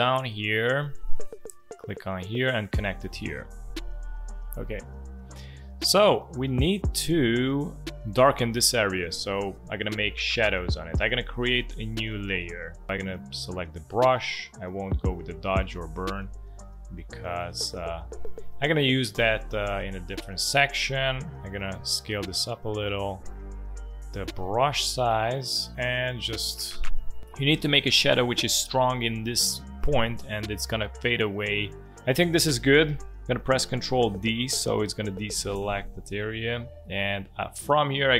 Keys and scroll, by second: 0.1 space, 16.5 space, 34.2 ctrl+d, 35.6 v.